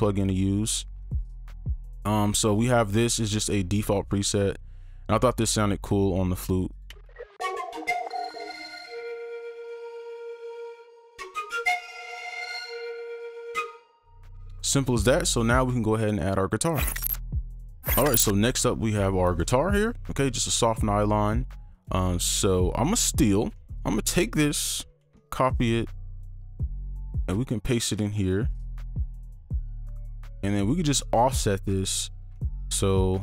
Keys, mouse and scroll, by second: 13.6 space, 23.7 ctrl+click, 26.5 right click, 27.1 typing, 27.2 ctrl+right click, 30.7-32.3 scroll up 1, 32.3 scroll, 32.4 ctrl+click.